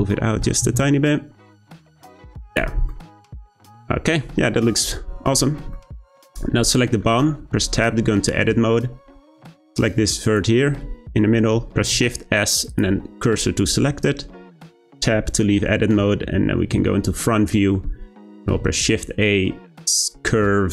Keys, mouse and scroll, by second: 2.5 click, 2.7 scroll down 1, 2.9-6.3 middle drag, 6.3 click, 6.7-7.6 middle drag, 7.6 Tab, 8.2 shift+middle click, 9.0-9.7 scroll up 2, 9.7 click, 11.8 shift+s, 14.7 Tab, 15.3-16.0 middle drag, 17.5-18.3 shift+middle drag, 18.3 shift+a.